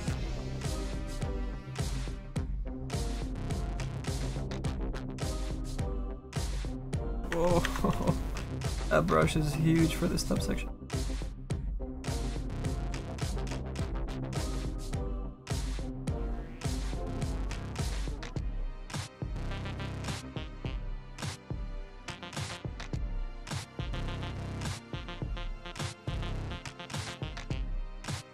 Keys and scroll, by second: 7.1 ctrl+z, 7.7 ctrl+z, 8.0 s, 14.6 s, 19.1 s.